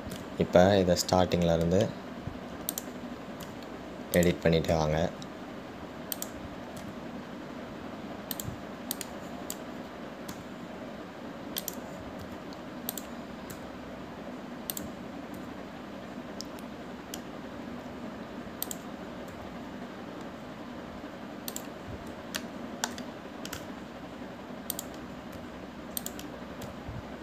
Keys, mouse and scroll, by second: 10.2 click, 23.6-24.9 shift+middle drag, 24.9 e.